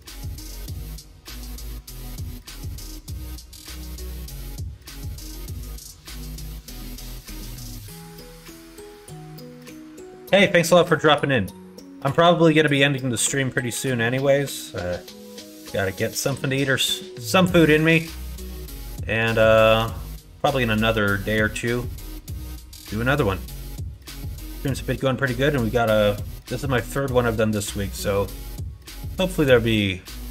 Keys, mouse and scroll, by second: 13.0 r, 17.4 shift+middle click, 19.4 shift+middle click, 20.4 shift+middle click, 22.2 shift+middle click, 23.3 middle click, 23.8 KP_1, 24.2 KP_3.